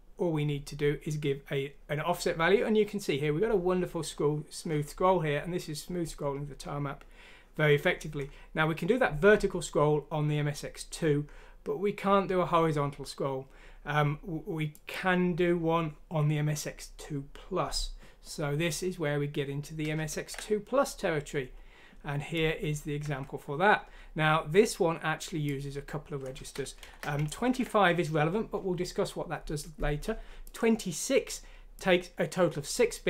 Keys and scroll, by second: 20.1 ctrl+z, 26.8 Down, 27.5 ctrl+q.